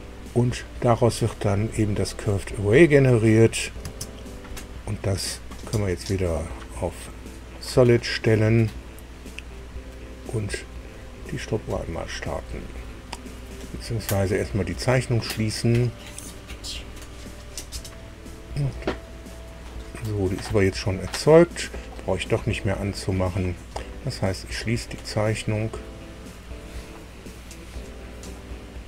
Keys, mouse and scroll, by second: 3.3 click, 3.8 space, 6.1 click, 8.9 click, 10.5 click, 17.1 click, 24.5 click.